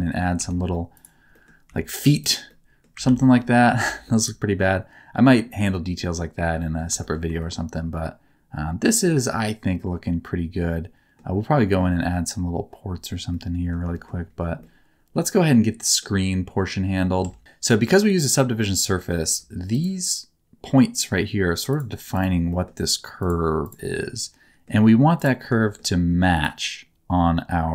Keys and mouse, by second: 0.3 3, 1.2 middle click, 1.6 e, 2.1 click, 2.4 middle click, 3.0 ctrl+z, 3.3 middle click, 3.7 Tab, 4.0-6.7 middle drag, 6.9 shift+middle click, 7.3 shift+middle click, 7.8-11.1 middle drag, 13.3 middle click, 13.9 shift+middle click, 14.5-16.0 middle drag, 17.2 Tab, 18.4 middle click, 19.2 1, 19.7 click, 20.9 click, 21.7 click, 22.5 middle click, 23.6 click, 23.9 middle click, 25.5 shift+middle click.